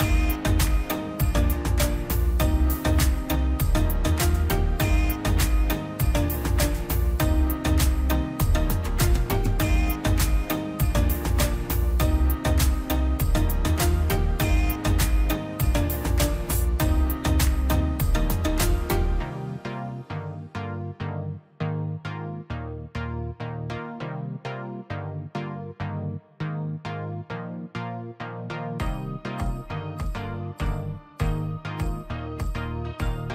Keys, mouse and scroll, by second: 0.4 p, 0.7 middle click, 1.4 middle click, 2.5 middle click, 2.9 scroll up 1, 3.2-4.6 drag, 4.6 middle click, 5.2 scroll down 1, 5.6 click, 5.9 scroll up 1, 6.1 click, 7.3 scroll down 1, 7.5 middle click, 8.4 m, 8.6 scroll up 1, 9.6 click, 10.4 ctrl+z, 10.7 click, 10.8 space, 11.1 click, 11.2 Escape, 11.7 ctrl+z, 12.2 scroll down 1, 12.4 middle click, 12.7 scroll down 1, 12.9 middle click, 13.4 middle click, 14.2-16.8 drag, 16.8 space, 17.0 click, 17.8 right click, 18.6 click, 19.5 middle click, 20.4 click, 20.6-20.9 scroll up 1, 21.0 click, 21.8 scroll down 1, 22.0 middle click, 25.4 click, 26.4 p, 26.6-30.2 drag, 30.5 scroll down 1, 30.6 middle click, 31.2 click, 31.4 scroll down 1, 31.8-33.3 middle drag.